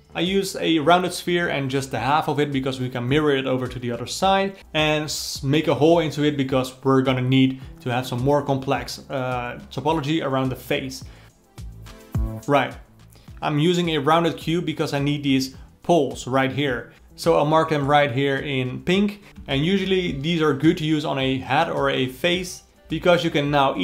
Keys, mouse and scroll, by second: 0.2 shift+click, 0.7 shift+click, 1.2 ctrl+click, 1.7 x, 2.6 alt+middle click, 2.7-4.0 drag, 6.7-9.8 drag, 10.7 click, 12.1-17.0 alt+middle drag, 17.0-19.0 drag, 19.0 alt+middle click, 19.9 alt+a, 20.4 alt+middle click, 20.8 c, 22.6 click, 23.0 click, 23.3 click.